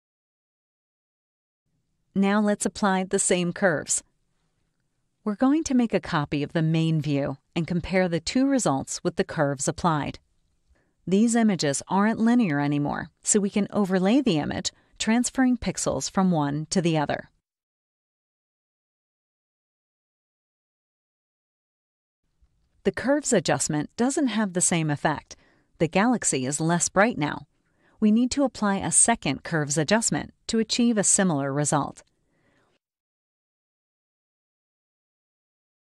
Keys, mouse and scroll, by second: 0.0 click, 2.2 click, 5.4 click, 8.0-9.9 drag, 10.9 click, 12.0 scroll up 1, 14.2 click, 14.3-15.2 scroll up 2, 15.3-16.1 typing, 18.8 click, 19.8 scroll down 2, 21.7 click, 23.4 click, 24.4 ctrl+shift+z, 26.4 ctrl+shift+z, 27.5 ctrl+shift+z, 28.4 ctrl+shift+z, 30.9 click, 31.2 scroll up 2, 32.4 click, 34.1 click.